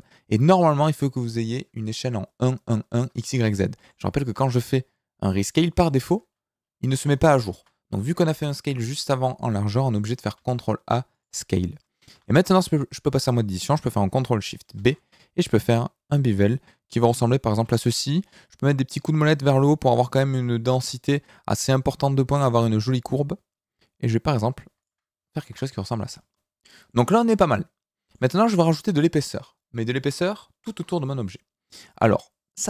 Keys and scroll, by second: 3.7 s, 7.5 ctrl+z, 10.3 ctrl+a, 12.1 Tab, 14.6 ctrl+shift+b, 25.5 Tab.